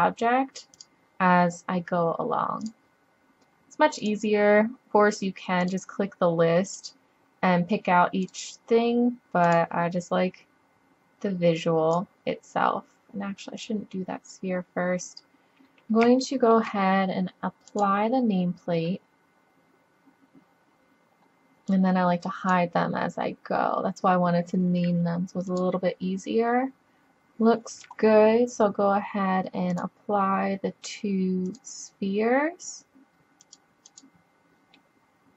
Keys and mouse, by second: 0.8 click, 2.4 click, 2.7-4.0 middle drag, 4.0-5.9 drag, 5.9 middle click, 6.7-8.6 drag, 8.6 middle drag, 9.5-11.5 drag, 13.6-14.7 drag, 14.7-15.3 middle drag, 15.3-16.4 drag, 17.7 click, 21.7-23.5 drag, 23.5-25.5 middle drag, 25.5-27.1 drag, 27.1-27.5 middle drag, 29.8-33.3 drag, 33.3 middle click, 33.5-34.8 drag, 34.8 middle drag, 35.0-35.3 drag.